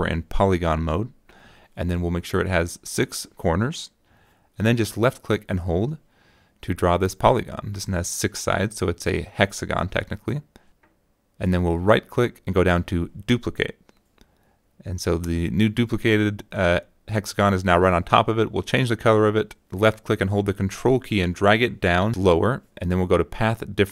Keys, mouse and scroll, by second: 5.2-7.9 drag, 8.4 click, 8.7 click, 9.2 middle click, 9.3 click, 11.5 middle click, 11.8 click, 12.5 -, 12.7 click, 13.3 right click, 16.4 click, 17.6 click, 18.1-19.7 ctrl+drag, 20.6 shift+click, 21.7 click.